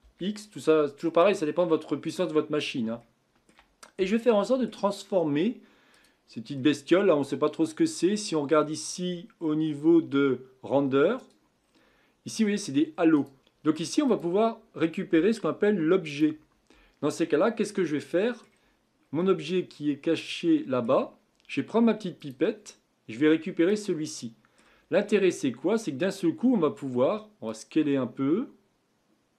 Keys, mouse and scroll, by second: 2.0-3.0 scroll up 9, 3.0-5.9 shift+middle drag, 5.9 click, 6.6-7.1 middle drag, 7.1-7.7 scroll up 5, 7.8-8.6 scroll down 2, 8.6 scroll down 4, 9.4-11.2 scroll down 4, 11.2-11.6 drag, 11.6-13.1 scroll down 4, 13.1-17.1 drag, 17.3-17.8 scroll down 4, 17.8-22.2 middle drag, 22.2 click, 24.2-24.8 middle drag, 24.8-27.5 scroll up 5, 27.5-29.3 drag.